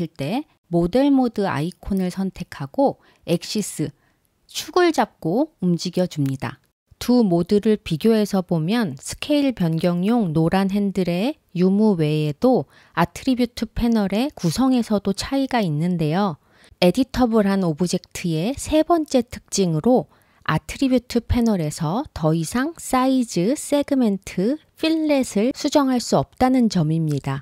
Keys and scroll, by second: 0.2 super+z, 5.4 super+z, 8.5 super+z, 11.3 super+z.